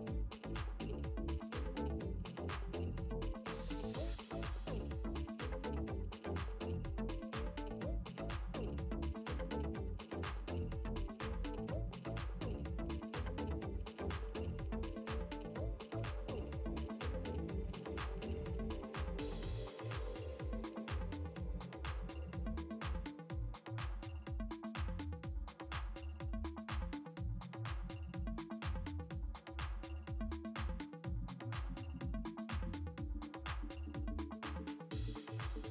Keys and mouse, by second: 3.0 space, 3.2 click, 4.3 click, 6.8 ctrl+z, 7.0 ctrl+space, 7.2 ctrl+click, 7.8 ctrl+z, 8.1 space, 8.1 click, 9.1 ctrl+z, 11.2 click.